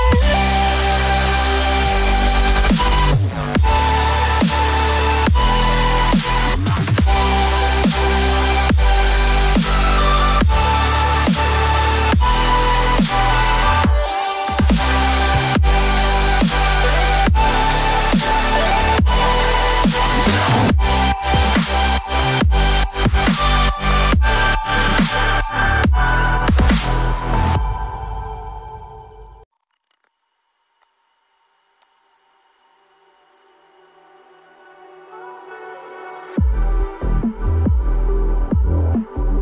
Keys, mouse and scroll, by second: 1.8 ctrl+click, 4.7 double click, 5.7-7.4 ctrl+scroll down 1, 7.4-8.0 ctrl+scroll, 8.2 right click, 14.7 double click, 17.9 Escape, 19.4 double click, 22.1 Escape, 24.6 double click, 26.1 double click, 33.5 double click.